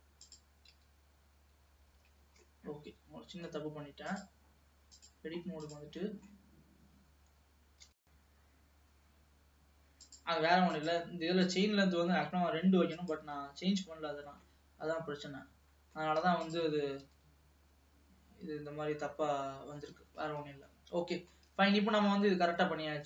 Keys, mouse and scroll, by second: 0.3 click, 0.9 g, 2.5-4.3 middle drag, 4.3-5.9 drag, 6.1 middle click, 6.6-7.3 scroll down 1, 8.0 g, 10.8 click, 11.5 click, 13.0-14.5 drag, 14.5-16.5 middle drag, 16.5 click, 17.1 g, 20.5 scroll down 1, 20.8-21.8 middle drag, 21.8 ctrl+s, 22.1 middle click, 22.9-23.0 scroll down 1.